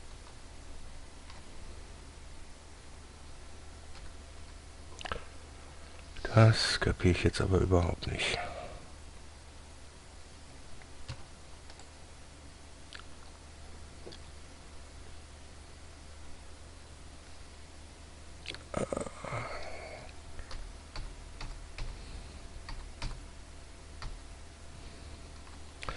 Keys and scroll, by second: 0.5 ctrl+z, 4.3 z, 4.7 z, 11.4 Tab, 20.9 ctrl+z, 21.3 ctrl+z, 21.7 ctrl+z, 23.0 ctrl+z, 24.4 ctrl+z.